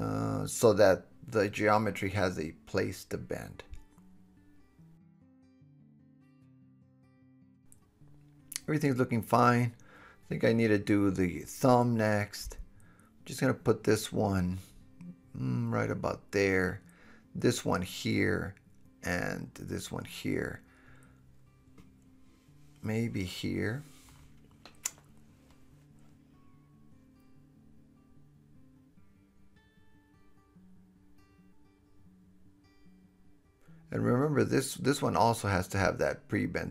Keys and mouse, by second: 2.1 Tab, 2.6 middle click, 2.6 right click, 3.5 middle click, 4.4 g, 4.7 drag, 5.0 g, 5.3 click, 5.6 middle click, 5.7-6.0 drag, 6.3 g, 6.7 drag, 7.0 g, 7.4 click, 7.6 middle click, 7.6 click, 9.4 KP_1, 9.8 KP_3, 10.3 KP_7, 12.4 middle click, 13.2 drag, 13.4 middle click, 14.1-16.6 drag, 15.8 g, 16.6-17.5 middle drag, 17.1 g, 17.5 click, 17.8-19.6 middle drag, 18.1 g, 19.6 drag, 19.8 middle click, 20.1-20.4 drag, 20.1 g, 20.4-21.3 middle drag, 21.4 drag, 21.8 g, 22.2 drag, 22.8 g, 26.7 click, 28.5 g, 29.2-30.6 drag, 30.3 KP_7, 30.6 middle drag, 30.9-31.4 middle drag, 31.5 middle click, 32.4 middle click, 32.5 KP_1, 33.5-35.2 middle drag, 33.6 KP_7, 35.2 g, 35.8 click, 36.3 g.